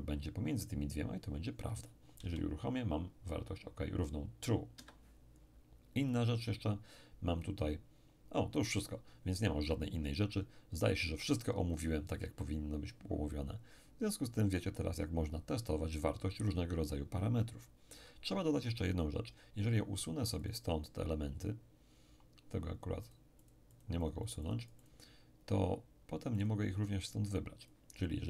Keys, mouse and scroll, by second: 2.2 p, 4.7 Escape, 6.1 click, 10.8 click, 20.4 click, 23.1-25.8 drag, 26.4 click, 27.7-28.2 drag.